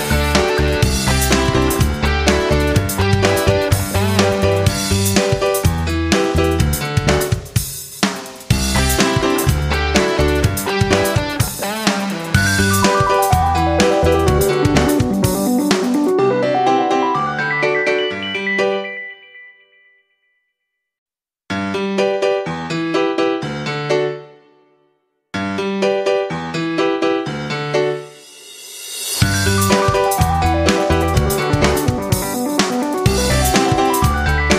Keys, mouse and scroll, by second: 16.3-17.2 scroll down 1, 18.4 F9, 18.7 click, 19.4 scroll down 1, 20.8-30.0 drag, 32.7 scroll down 1, 34.0-34.5 drag.